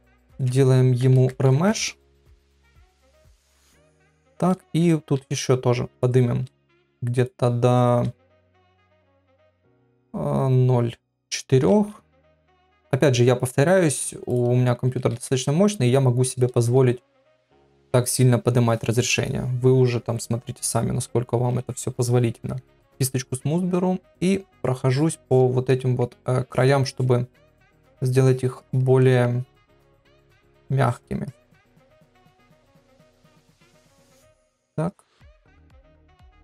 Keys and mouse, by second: 4.3 middle click, 5.2 shift+r, 6.5 shift+r, 11.7 shift+r, 15.2 ctrl+r, 20.1 KP_Divide, 21.1-21.5 ], 24.1 click, 24.5 click, 24.9 click, 25.3 click, 25.7 middle click, 26.5 click, 26.9 click, 27.3 click, 28.0 click, 28.6 click, 29.0 middle click, 29.7 click, 30.1 click, 30.5 click, 30.8 click, 31.3 click, 31.6 middle click, 32.4 click, 32.7 middle click, 33.3 click, 33.7 click, 34.1 middle click, 34.6 click, 34.9 click, 35.2 middle click, 35.6 click, 36.0 click, 36.3 middle click.